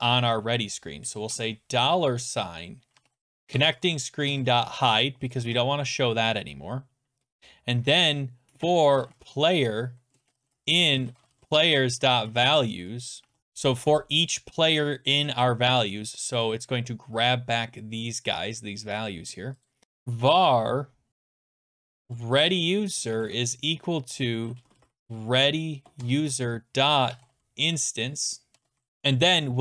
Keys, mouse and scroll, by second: 1.3 typing, 2.7-5.9 typing, 7.2 Return, 8.2-13.9 typing, 16.5 click, 18.8 click, 19.6-23.1 typing, 19.7 click, 24.4-29.4 typing.